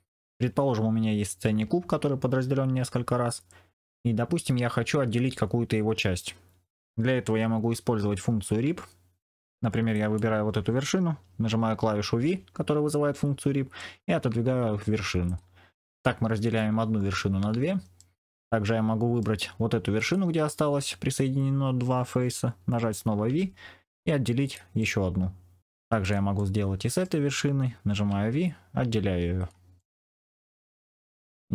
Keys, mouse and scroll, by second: 10.0 click, 12.1 v, 15.8-18.0 middle drag, 18.6 middle click, 20.0 click, 23.2 v, 24.7 middle click, 25.9 click, 26.3 middle click, 27.9 v, 29.7 middle click.